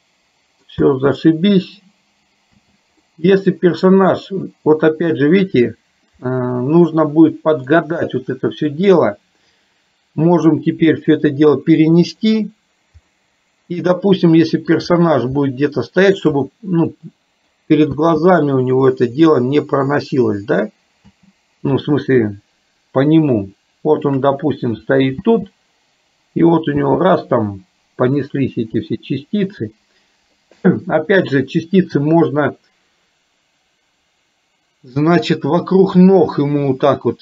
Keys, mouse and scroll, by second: 0.9 space, 2.7 space, 3.1-5.5 middle drag, 6.4-7.7 middle drag, 8.7 shift+click, 10.7-12.6 drag, 13.2-14.5 middle drag, 15.5 shift+middle click, 17.1 middle click, 18.0 space, 19.3 middle click, 22.1-24.1 shift+middle drag, 25.2 space, 26.8 space, 28.3-29.6 middle drag.